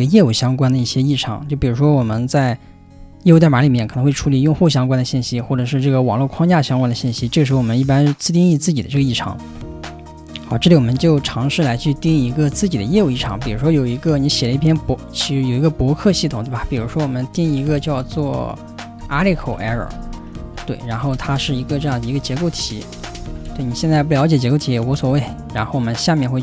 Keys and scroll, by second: 11.7-14.4 typing, 16.6-24.1 typing, 24.9 Return.